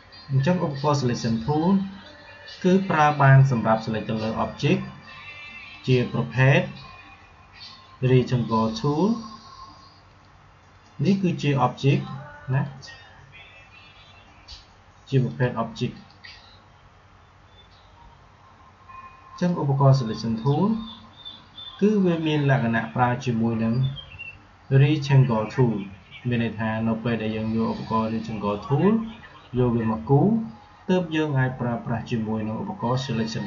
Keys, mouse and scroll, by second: 4.4 click, 9.9 click, 15.1 click, 19.2 click.